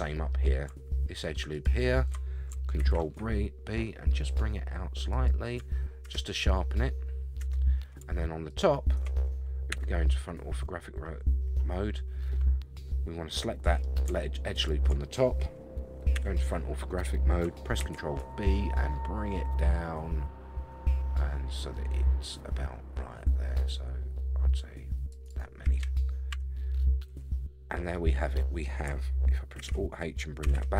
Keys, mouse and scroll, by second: 1.5 alt+click, 2.8 ctrl+b, 6.0 Tab, 6.4-7.6 middle drag, 7.4 Tab, 8.5 alt+click, 9.7 KP_1, 10.5 scroll up 2, 13.3 middle click, 14.5 alt+click, 16.1 KP_1, 17.8 ctrl+b, 25.2 shift+right click, 26.3 Tab, 26.7-27.1 scroll down 3, 27.1 a, 27.7 scroll down 2, 27.9-28.6 middle drag, 29.6 alt+h, 30.4 a, 30.5 a.